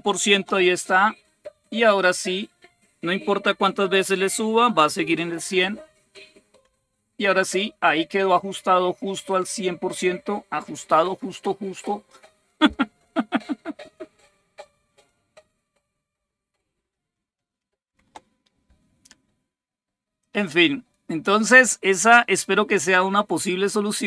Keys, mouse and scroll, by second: 20.0-24.0 drag.